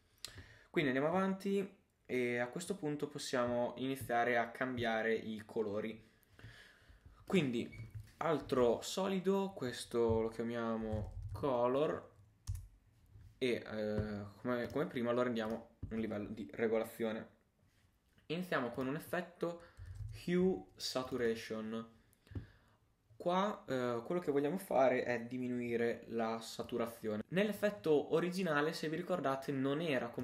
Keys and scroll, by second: 8.4 super+y, 10.6-11.5 typing.